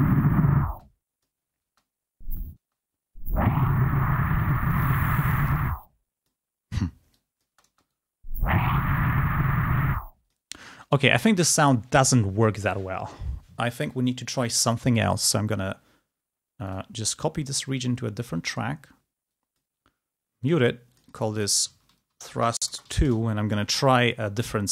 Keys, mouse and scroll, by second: 1.9 space, 3.9-10.9 drag, 8.0 space, 14.9 click, 15.3 right click, 16.8 click, 19.4 click, 21.1-23.1 drag, 23.1 shift+2, 23.4 shift+Return.